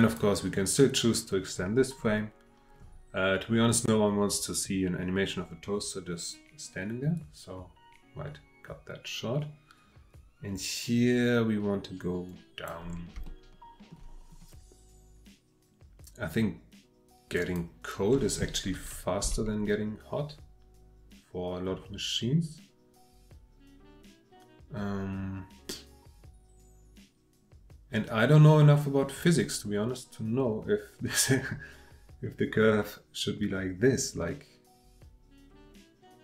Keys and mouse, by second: 7.1 click, 13.3 shift+middle click, 17.3 click, 19.2 g.